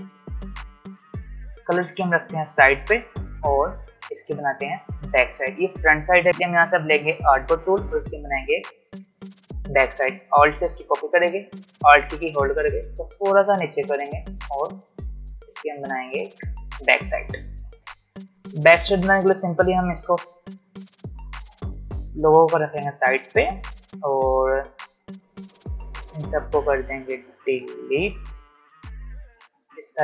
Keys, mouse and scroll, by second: 1.3-3.4 drag, 3.4 space, 3.6 click, 3.9 space, 7.3 click, 10.5-12.8 alt+drag, 12.8 alt+scroll down 1, 12.9-15.0 drag, 15.0 v, 15.4 click, 16.6-16.9 alt+scroll up 1, 19.8-24.1 drag, 26.6-30.0 drag.